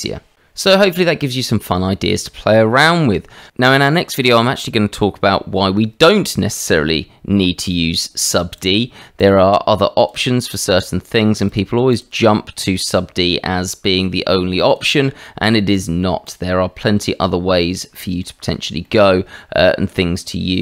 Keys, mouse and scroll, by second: 8.6 click, 9.2 click, 9.9 shift+click, 11.4 shift+click, 11.9 shift+click, 12.3-12.7 drag, 13.0 alt+x, 14.7 alt+x, 14.7 click, 15.2-16.0 drag, 16.2 right click, 17.0-17.5 middle drag, 18.2 shift+middle drag, 18.8-20.5 middle drag.